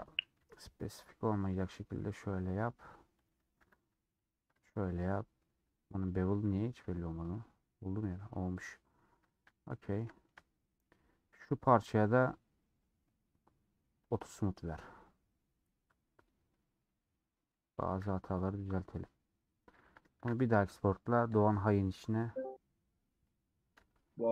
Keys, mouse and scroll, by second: 0.0 alt+click, 0.3 ctrl+b, 1.5 alt+click, 1.7-3.2 middle drag, 3.2 alt+click, 3.5 ctrl+b, 4.7 middle click, 5.6 Tab, 6.3 Tab, 7.0 scroll down 1, 7.2-8.5 middle drag, 8.5-9.2 scroll down 4, 8.8 middle click, 9.2 shift+middle click, 9.5 scroll down 1, 9.7 middle click, 10.5 scroll down 1, 10.6 middle click, 11.3-17.5 drag, 17.5 middle click, 18.4 scroll down 2, 18.6-19.7 middle drag, 19.7 a, 20.2 ctrl+shift+e.